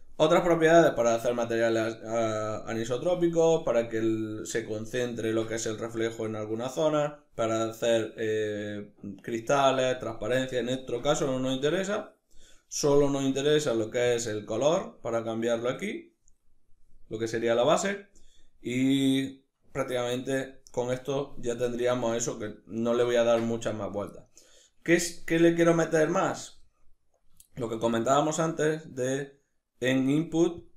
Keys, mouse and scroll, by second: 21.8-30.7 ctrl+middle drag, 27.2 shift+a.